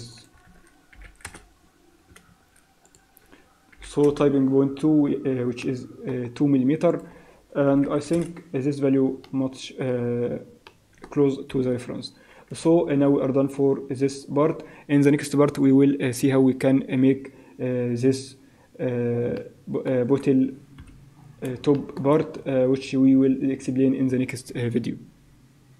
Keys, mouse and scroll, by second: 0.2 click, 2.9 click, 5.6 middle click, 6.9 click, 9.2 middle click, 10.0-10.7 scroll down 3, 10.7 middle click, 11.5 KP_1, 11.9-12.3 scroll down 3, 13.0 scroll up 5, 13.9-14.2 scroll up 4, 14.5 scroll down 3, 19.4 middle click, 20.3-20.8 scroll down 4, 20.8 KP_1, 21.2 scroll up 5, 21.8 shift+middle click.